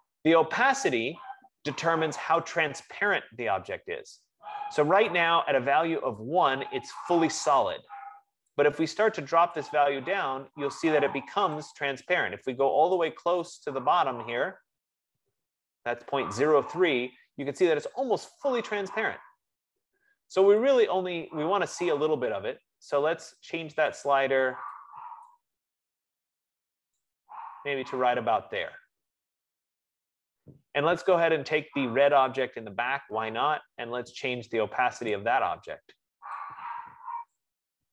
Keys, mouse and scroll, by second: 2.7 click, 9.8 click, 13.1 click, 22.1 click, 24.1 click, 25.4 click, 27.3 click, 32.5 click, 35.5 click.